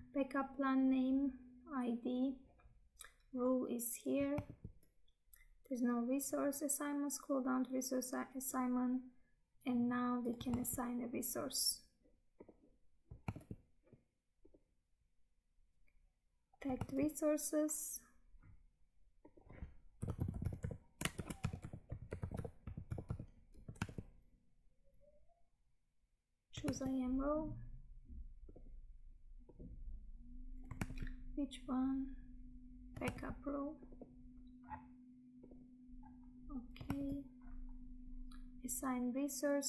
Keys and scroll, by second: 4.5 Tab, 10.6 Tab, 13.4 Tab, 16.9 Tab, 23.9 Tab, 26.8 Tab, 30.9 Tab, 33.1 Tab, 37.0 Tab.